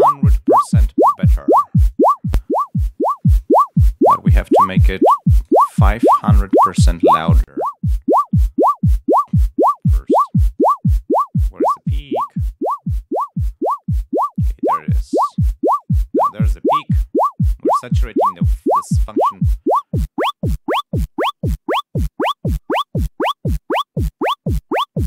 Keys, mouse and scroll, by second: 6.0 click, 7.2-8.5 drag, 9.1 click, 10.5-12.0 drag, 19.6-20.7 drag.